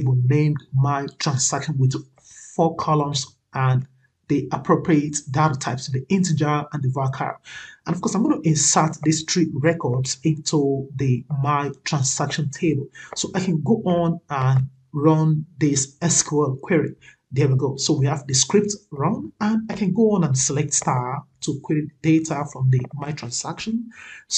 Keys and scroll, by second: 23.4 ctrl+c.